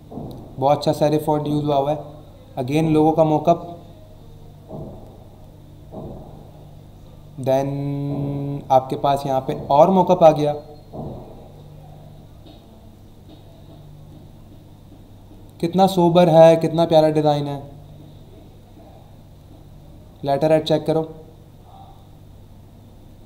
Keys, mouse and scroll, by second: 1.3 scroll down 1, 1.8 scroll down 1, 6.0 scroll down 1, 6.6 scroll down 1, 7.2 scroll down 1, 9.2 scroll down 1, 11.4 scroll down 1, 13.2-13.8 scroll down 2, 14.2-14.9 scroll down 2, 15.2 scroll down 1, 16.7-17.7 scroll down 3, 18.4 scroll up 1, 19.0 scroll down 1, 20.8-21.7 scroll down 2, 22.3-23.0 scroll down 2.